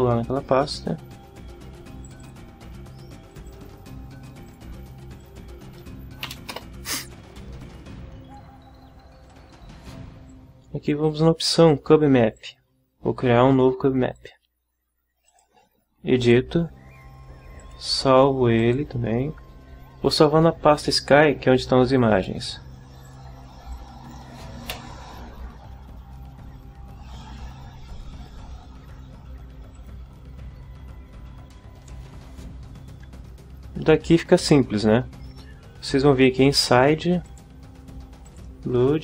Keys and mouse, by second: 2.0 click, 3.3 click, 4.5 click, 5.2 click, 6.3 Delete, 6.5 Return, 9.3 click, 10.3 click, 12.3 click, 14.1 click, 15.3 click, 16.2 click, 17.6 click, 18.6 click, 21.9 click, 23.0 click, 23.7 click, 24.7 Delete, 29.7 click, 37.2 click, 38.3 click.